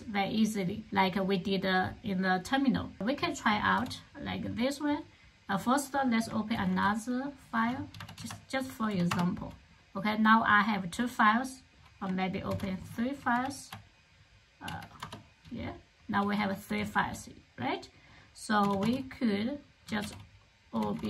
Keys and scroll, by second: 6.4 super+o, 7.8 Down, 8.0 Down, 8.9 Return, 12.3 super+o, 13.0 Down, 13.2 Down, 13.5 Down, 14.5 Down, 14.8 Return, 15.8-17.3 typing, 18.5-21.0 typing.